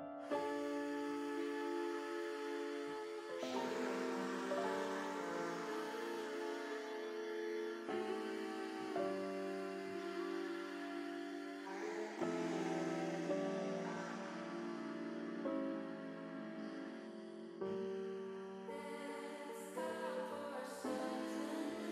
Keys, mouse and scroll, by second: 0.0 click, 1.2 KP_7, 2.6 e, 5.1 click, 6.2 r, 8.8 click, 9.9-12.3 drag, 13.1 middle click, 14.5-16.6 middle drag, 16.7 middle click, 17.8 middle click, 19.6 click, 20.5 shift+click, 21.1 middle click.